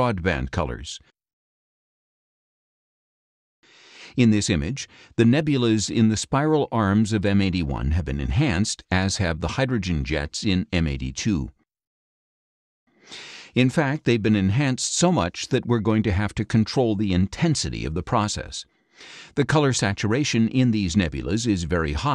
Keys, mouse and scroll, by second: 0.7 click, 2.7 click, 3.4 middle click, 4.5 scroll down 2, 5.4 middle click, 11.8 scroll up 1, 12.9 middle click, 14.3-15.4 middle drag, 16.1 scroll down 2, 16.8 middle click, 18.5 click, 19.1 middle click, 20.4-22.1 drag.